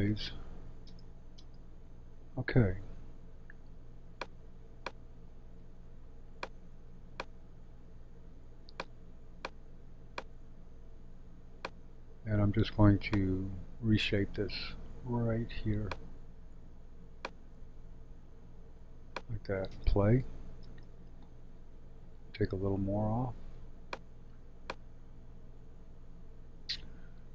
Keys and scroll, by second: 1.0 space, 19.6 space.